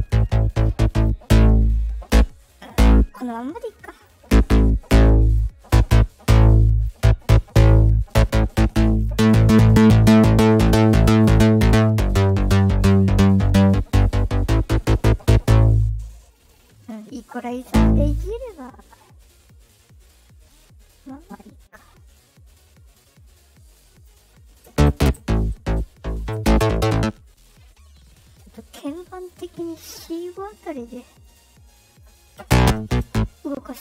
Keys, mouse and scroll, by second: 0.4 right click, 0.9 click, 3.9 click, 5.2 click, 6.7 click, 19.4-24.0 drag, 29.0 click, 31.2 click.